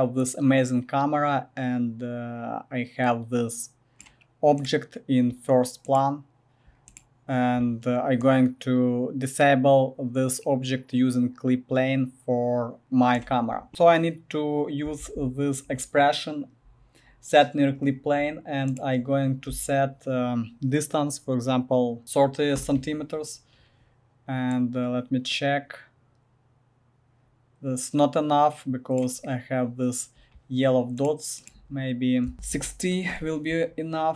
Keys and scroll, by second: 15.0 ctrl+v, 19.5 space, 21.8-22.5 typing, 22.6 Return, 32.2-33.0 typing, 33.1 Return.